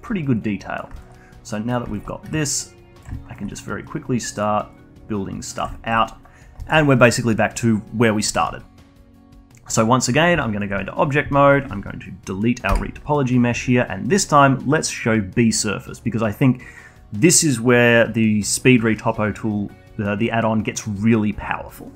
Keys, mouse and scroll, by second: 0.8 alt+middle click, 1.0-7.6 alt+drag, 7.6 scroll down 2, 7.8-10.4 alt+drag, 10.4 Tab, 11.6-12.7 alt+drag, 13.9 Delete, 14.3 click, 15.2 click.